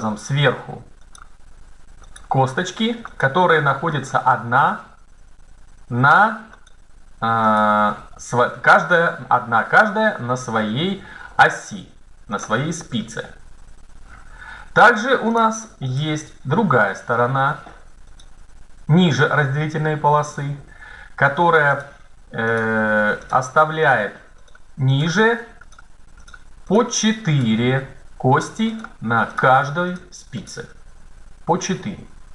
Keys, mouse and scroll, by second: 0.9-2.0 right drag, 4.5-5.6 right drag, 6.4-7.9 right drag, 7.9-9.1 drag, 12.2-14.3 right drag, 17.9-19.2 right drag, 19.2 middle click, 21.7-24.3 right drag, 31.3-32.3 right drag.